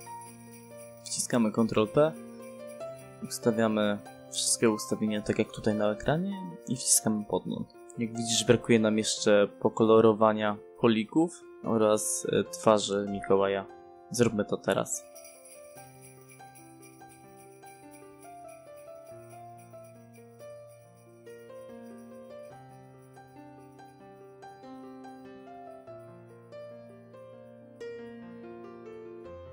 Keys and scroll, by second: 14.4 Escape, 18.8 h, 18.9 space, 26.9 space.